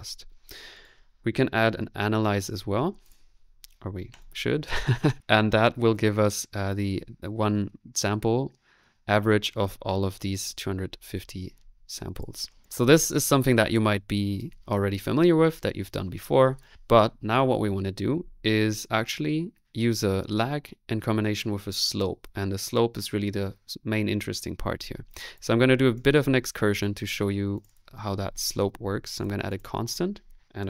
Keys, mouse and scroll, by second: 1.6-2.6 typing, 16.1 middle click, 16.6 click, 17.5 click, 25.1 click, 25.4 click, 25.7 middle click, 26.0-27.6 drag, 27.5-28.3 typing, 27.8 click, 29.2 click, 29.7 click, 29.9 middle click, 30.4-30.6 typing, 30.4 right click.